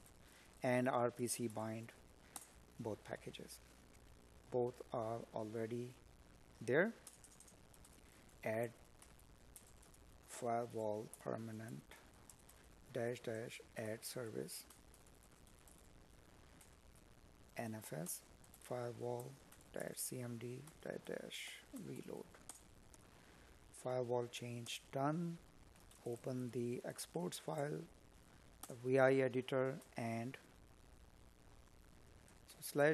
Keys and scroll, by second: 2.1 space, 9.8 space, 15.7 space, 27.5 space.